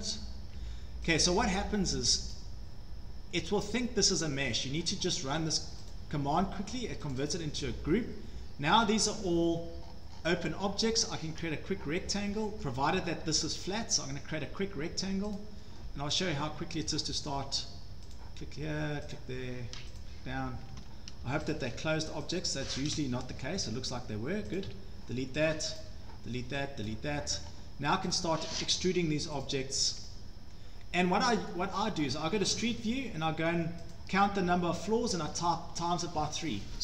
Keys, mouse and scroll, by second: 0.5 Escape, 0.7 Escape, 1.2 click, 2.3 right click, 4.3 click, 5.4 Escape, 5.9 click, 6.7 scroll down 3, 7.1 scroll up 1, 7.3 click, 7.3 scroll, 8.8-9.3 scroll, 9.8-10.6 scroll, 12.2 scroll down 11, 12.6 shift+click, 12.7 click, 12.9 scroll down 3, 14.7 scroll, 15.4 click, 16.2 click, 16.9 click, 18.2 click, 19.1 click, 20.0 click, 20.6 Escape, 20.8 Escape, 21.5 click, 22.3 click, 22.5 click, 23.6 Delete, 24.6 click, 24.7 Delete, 25.8 click, 26.0 Delete, 27.0 Delete, 27.0 click, 27.4 scroll down 6, 28.2 click, 28.5-28.8 scroll down 2, 29.5 click, 31.5 scroll down 1, 31.8-32.1 scroll up 5, 32.3-32.6 scroll down 3, 33.3-33.7 scroll, 33.9 click, 34.3 scroll up 1, 35.1-35.6 scroll down 3.